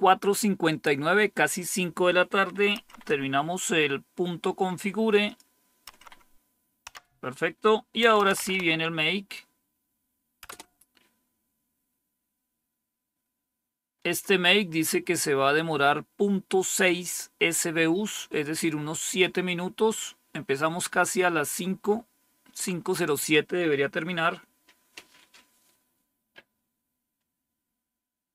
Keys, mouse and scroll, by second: 2.7 Up, 5.2 click, 5.8 Up, 6.8 Down, 7.7-8.9 typing, 10.4 Return, 12.5-13.3 typing, 13.8-17.7 scroll up 1.